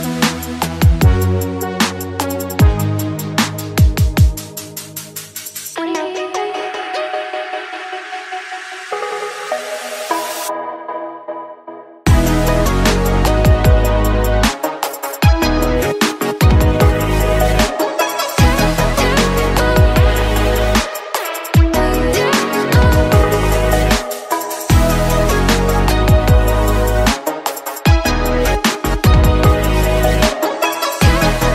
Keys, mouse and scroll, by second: 0.9 click, 1.5 shift+middle click, 1.7-2.3 scroll up 1, 2.3 click, 2.8 click, 3.5 shift+click, 4.1 shift+click, 4.9-6.3 shift+middle drag, 6.3 x, 8.4-10.8 middle drag, 11.0 click, 12.0-13.9 middle drag, 13.9 click, 14.9-16.9 middle drag, 16.9 click, 18.1 click, 18.7-20.2 middle drag, 20.2 click, 20.7-21.9 middle drag, 21.9 a, 23.3 click, 25.1 click, 26.3 click, 28.4 click, 29.4 click, 30.7-31.5 middle drag.